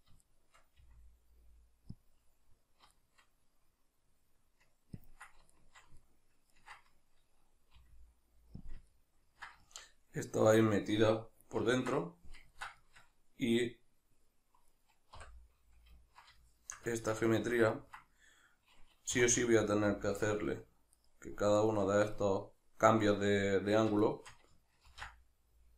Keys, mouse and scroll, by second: 0.3-2.1 shift+middle drag, 0.8 r, 2.1 click, 3.0-5.0 shift+middle drag, 5.0-5.6 ctrl+drag, 5.6-8.8 shift+middle drag, 7.8 r, 8.8 drag, 9.0-14.7 ctrl+middle drag, 14.7 right click, 15.2 l, 16.0-19.6 ctrl+middle drag, 19.2 2, 19.6 alt+right click, 21.0 shift+right click, 21.6 shift+right click, 22.1-24.0 shift+middle drag, 24.0 shift+right click, 24.9 ctrl+b.